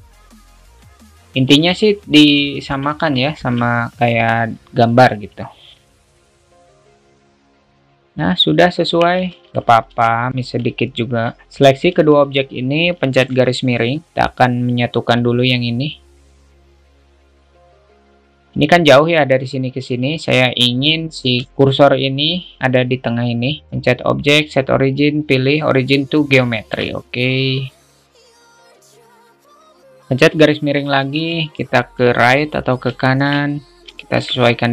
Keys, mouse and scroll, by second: 1.6 a, 2.1 alt+shift+middle click, 2.7 shift+middle click, 3.5 alt+shift+middle click, 5.1 click, 7.4 click, 7.4 a, 7.7 click, 9.5 alt+z, 9.6 alt+middle click, 10.9-11.5 middle drag, 15.5-16.3 drag, 16.4 alt+middle drag, 17.1 middle click, 17.5 alt+middle click, 23.7-26.2 drag, 26.7 shift+middle click, 27.9 click, 28.5-29.1 drag, 29.5-29.9 drag, 30.5 /, 33.3 alt+shift+middle click, 34.2 alt+shift+middle click.